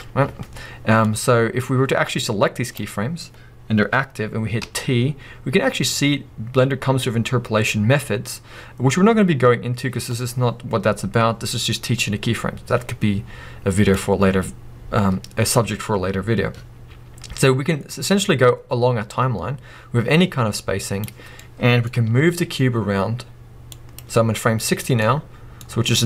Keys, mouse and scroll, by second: 1.0-21.4 drag, 4.6 t, 21.3 scroll down 2, 21.4-23.9 middle drag, 22.0 g, 23.9 click, 25.0-26.0 middle drag.